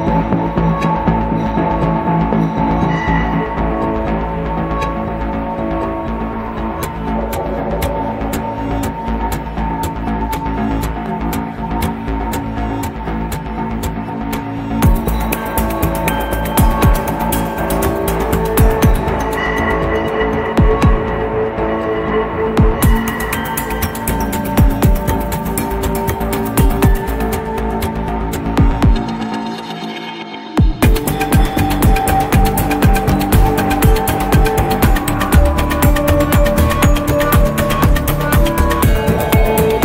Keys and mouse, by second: 1.1 ctrl+a, 7.2-8.8 middle drag, 9.4 n, 10.4-11.7 middle drag, 12.5 s, 17.5-18.9 middle drag, 21.0 ctrl+a, 30.5-31.7 middle drag.